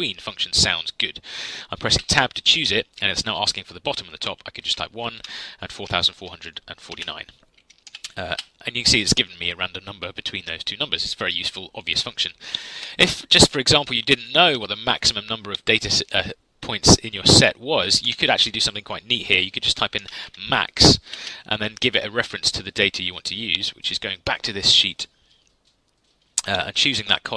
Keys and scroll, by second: 1.9 Tab, 4.5-7.8 typing, 8.3 Return, 18.0 Delete, 19.7-21.0 typing.